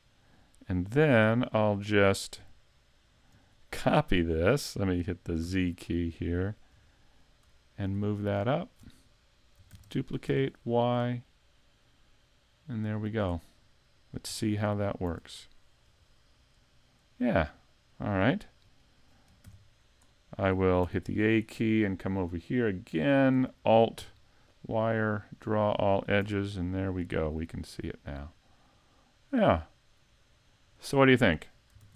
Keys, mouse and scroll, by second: 1.2 KP_2, 2.4 KP_5, 3.3 KP_7, 5.5 z, 6.7 KP_5, 7.6 shift+middle click, 8.1-8.6 scroll up 1, 8.6 shift+middle click, 9.7 shift+d, 13.3 click, 13.6-14.3 scroll down 3, 14.3 z, 14.7 middle click, 15.1 a, 15.9 KP_5, 16.7 middle click, 18.3 shift+middle click, 18.9 middle click, 19.5 shift+c, 20.1-20.9 scroll down 1, 20.9 a, 22.9-23.3 scroll down 5, 24.5 alt+click, 25.1 alt+click, 25.9 scroll down 2, 26.2 a, 27.0 middle click, 31.0 shift+middle click, 31.8 s.